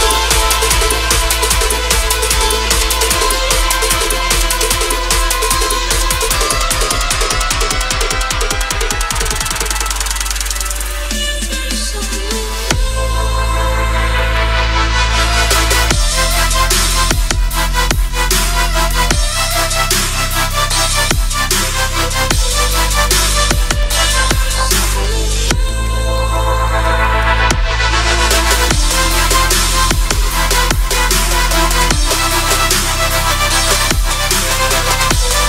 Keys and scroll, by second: 22.9 F3, 23.4 Escape, 27.3 shift+F2, 27.6 Escape.